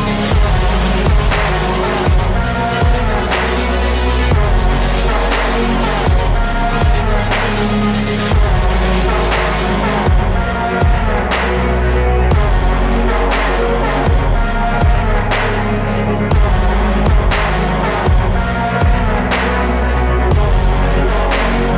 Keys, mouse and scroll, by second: 0.1 scroll down 2, 0.3 middle click, 0.6-1.7 scroll up 2, 1.7-4.2 drag, 4.7 scroll up 2, 5.0-6.4 scroll down 4, 6.4-7.5 drag, 7.5-8.3 scroll up 4, 8.3-8.7 scroll down 3, 10.1 click, 10.4-10.8 scroll up 1, 10.8 middle click, 11.2-11.9 scroll up 2, 11.9-15.6 drag, 16.0-16.8 scroll down 2, 16.8 scroll down 1, 17.0 middle click, 17.4-18.3 scroll up 3, 18.3-20.2 scroll down 1, 20.2-21.7 drag.